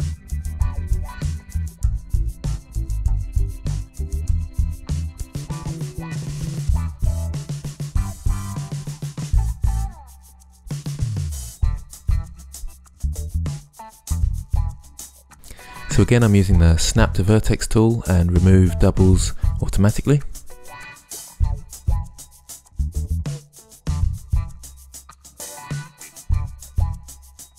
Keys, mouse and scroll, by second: 0.6 z, 0.6 a, 0.8 c, 1.3 click, 1.6 click, 1.7 Tab, 2.0 Tab, 2.7 g, 2.9 g, 3.2 g, 5.1 right click, 5.6 Tab, 5.8-6.6 typing, 9.0 Tab, 9.9 Tab, 10.8 s, 11.9 Tab, 13.0 ctrl+Tab, 13.1 ctrl+Tab, 13.8 e, 14.6 shift+Tab, 14.7 g, 14.8 g, 14.9 g, 15.4 click, 16.6-18.7 typing, 17.8 ctrl+z, 20.7 g, 20.8 g, 21.0 g, 22.8-26.4 typing, 25.5 shift+Tab.